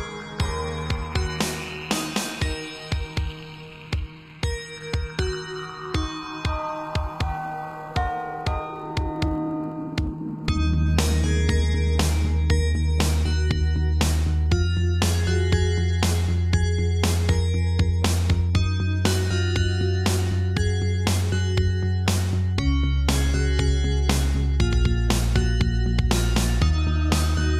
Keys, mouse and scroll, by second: 0.8-1.7 typing, 5.8 click, 5.9 click, 6.2 scroll down 2, 6.4 middle click, 7.3 middle click, 9.3 shift+middle click, 10.8 middle click, 11.9 Left, 12.3 Right, 13.5 Left, 15.5 shift+middle click, 15.9 middle click, 17.1 shift+middle click, 18.7 shift+click, 18.8 shift+click, 19.3 shift+click, 20.1 7, 21.0 shift+middle click, 21.7 g, 23.0 click, 23.8 Left, 23.9 Right, 24.9 Right, 24.9 ↔, 25.2 Right, 25.8 Right, 26.3 Left, 27.2 middle click.